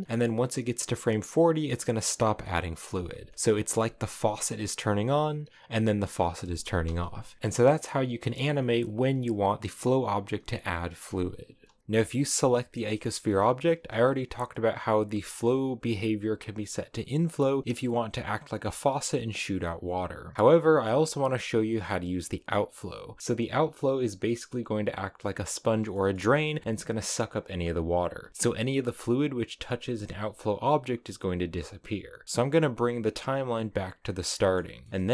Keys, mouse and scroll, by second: 2.1 scroll down 2, 2.3 middle click, 2.7 space, 3.3 click, 3.5 space, 7.0 click, 7.4 space, 11.3 space, 12.7 shift+middle click, 13.1 space, 13.7 space, 15.3-18.2 drag, 20.5-23.2 drag, 25.8-27.9 shift+middle drag, 27.9-28.3 scroll up 2, 28.3-30.3 middle drag, 32.2 scroll up 1, 32.5-34.3 drag, 34.3 middle click, 34.5 scroll up 4, 34.7 shift+middle click, 35.0 scroll down 1.